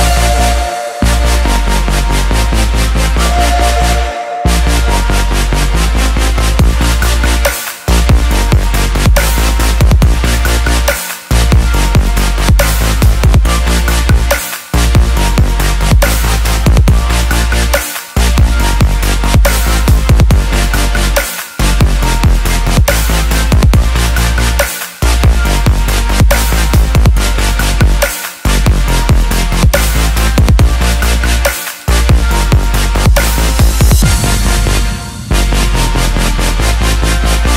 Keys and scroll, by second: 30.8 ctrl+t.